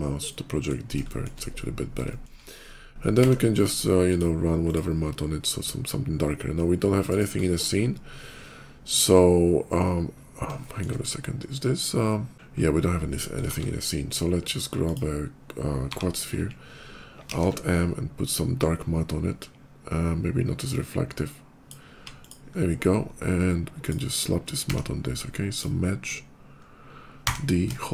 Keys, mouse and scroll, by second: 0.1 middle click, 1.9 shift+middle click, 2.8 d, 3.9 click, 4.5 click, 5.4 middle click, 6.2 middle click, 6.4 middle click, 6.7 middle click, 6.9 click, 7.2 middle click, 7.6 middle click, 8.3 middle click, 9.6 middle click, 9.8 middle click, 10.4 shift+middle click, 10.8 shift+middle click, 12.3 shift+d, 12.5 shift+middle click, 12.9 shift+middle click, 13.3 shift+a, 14.6 click, 15.6 g, 15.9 click, 17.1 alt+m, 18.1 click, 20.5-21.5 drag, 21.8 x, 22.0 click, 22.3 middle click, 22.7 middle click, 22.9 middle click, 23.2 middle click, 23.6 click, 24.5 d, 25.3 click, 25.8 click, 26.4 click, 26.5 click, 27.0 d, 27.8 d.